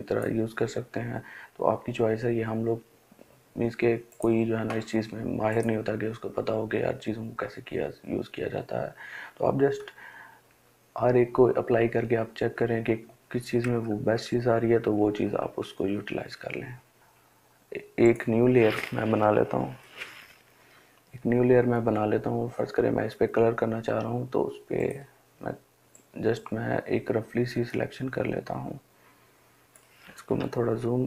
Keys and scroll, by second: 9.8 Down, 10.3 Down, 10.7 Down, 11.0 Down, 11.4 Down, 11.8 Down, 12.1 Down, 13.0 Down, 13.3 Down, 13.6 Down, 14.7 Down, 17.0 Delete, 30.2 ].